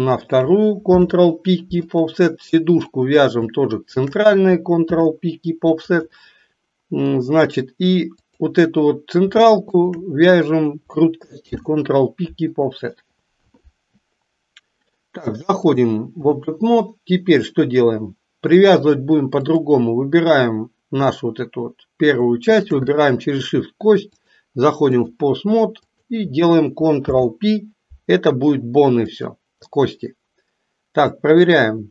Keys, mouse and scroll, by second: 0.9 ctrl+p, 2.6 click, 3.8 shift+click, 4.8 ctrl+p, 8.2 click, 9.7 shift+click, 11.3 ctrl+p, 15.7-16.4 drag, 19.3 click, 22.4 shift+click, 24.2-25.3 drag, 25.8 click, 27.0 ctrl+p, 31.6-31.9 drag.